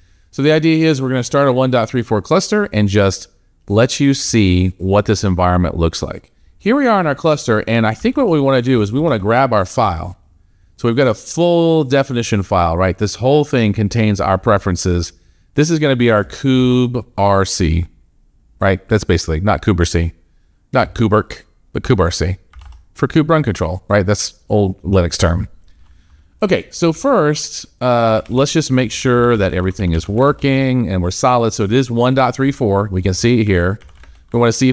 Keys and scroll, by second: 8.0 alt+Tab, 16.4 ctrl+c, 22.4 alt+Tab.